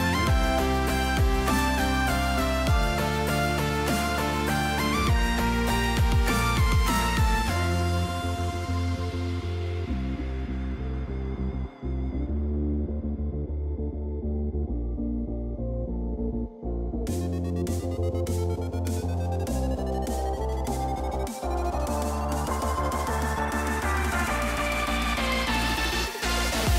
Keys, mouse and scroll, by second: 1.4-3.9 drag, 3.0 KP_0, 4.4-6.4 drag, 5.4 BackSpace, 10.4 middle click, 10.7 click, 12.4 KP_0, 14.5-15.9 drag, 16.9-19.1 drag, 23.5 click, 23.9 Tab, 24.5 click, 25.1 click, 25.7 Tab.